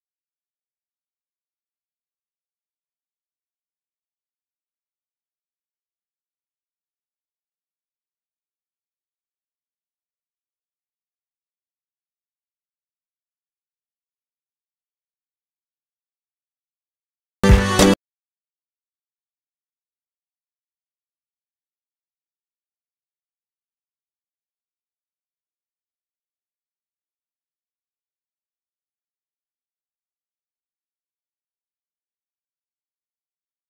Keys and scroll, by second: 8.2 alt+space, 21.6 alt+space, 23.4 alt+space, 24.2 alt+space.